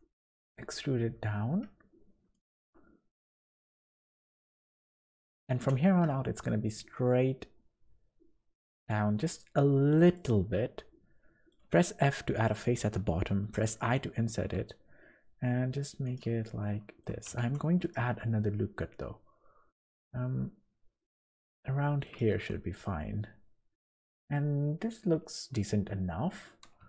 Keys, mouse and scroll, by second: 2.5 s, 5.6 e, 8.9 s, 10.5 middle click, 11.7 f, 12.4 scroll up 1, 13.5 i, 16.4 middle click, 17.4 ctrl+r, 22.4 Tab, 22.8 middle click, 24.5-24.8 scroll down 2, 25.3 scroll down 1, 26.8 Tab.